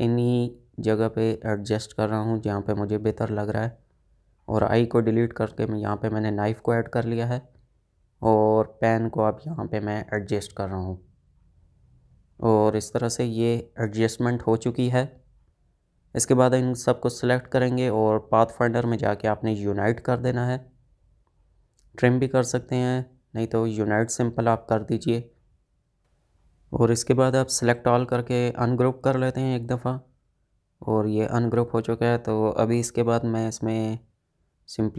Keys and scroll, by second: 1.7 space, 3.1 Delete, 5.5 space, 10.0 space, 13.9 ctrl+shift+z, 23.3 ctrl+z.